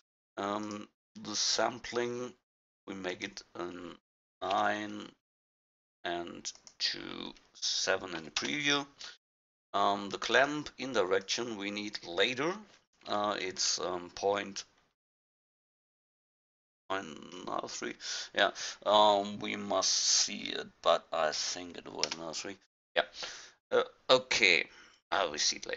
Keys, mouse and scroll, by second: 0.7-5.8 drag, 6.6-16.1 drag.